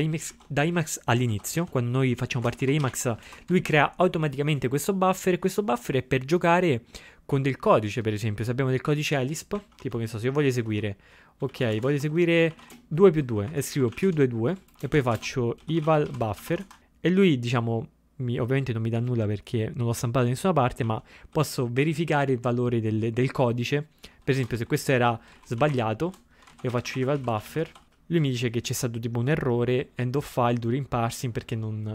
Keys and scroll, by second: 0.3 ctrl+x, 0.8 0, 1.3 ctrl+x, 1.6 b, 3.3 typing, 9.8 shift+(, 11.6 ctrl+x, 11.7 ctrl+x, 12.0 ctrl+x, 20.9 ctrl+a, 21.3 ctrl+e, 24.4 BackSpace, 24.6 ctrl+a.